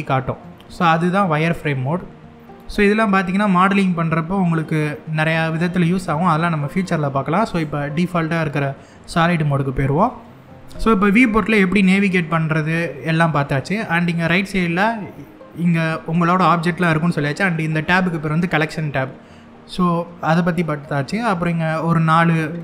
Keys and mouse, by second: 0.6-1.3 middle drag, 7.1 click, 9.7-10.3 middle drag, 11.2 middle click, 12.6-12.9 middle drag.